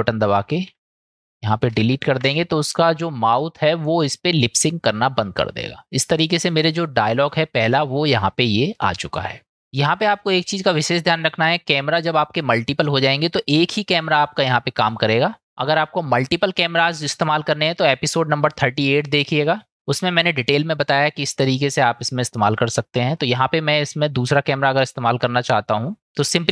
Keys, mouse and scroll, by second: 0.7 k, 2.2 Delete, 6.7 click, 7.1-7.9 drag, 9.4 middle click, 10.4-11.1 middle drag, 11.8 click, 14.4-15.0 middle drag, 21.3-23.2 middle drag.